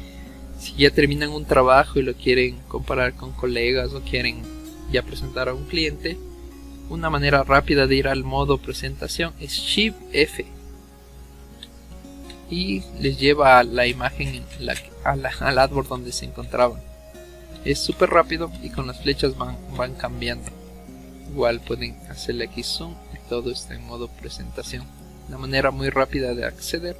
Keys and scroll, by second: 9.9 shift+f, 25.6 Escape.